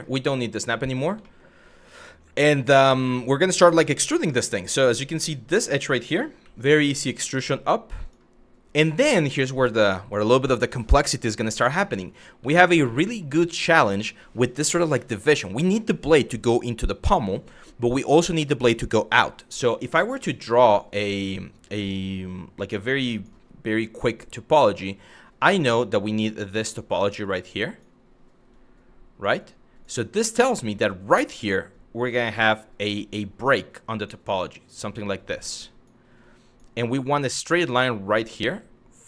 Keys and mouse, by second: 0.4 click, 0.9 middle click, 2.7 shift+middle click, 3.7 shift+middle click, 5.1 2, 5.3 click, 6.0 e, 7.7 click, 12.2 shift+middle click, 12.7 shift+middle click, 19.8 click, 21.1-22.9 drag, 24.1-25.8 drag, 25.9-27.4 drag, 28.3 click, 29.0 click, 31.3 click, 31.9-33.7 drag, 34.0 click, 34.9 click, 36.0 click, 36.5 click, 37.5-38.9 drag.